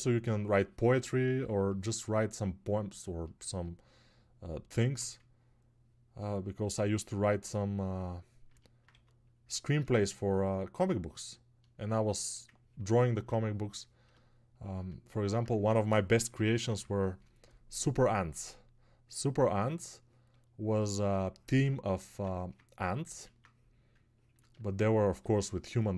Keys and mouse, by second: 9.5 alt+1.